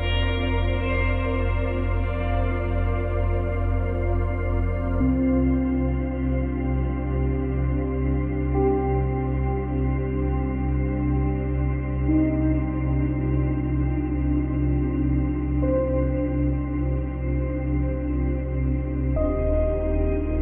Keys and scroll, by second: 1.1 space, 19.7 space.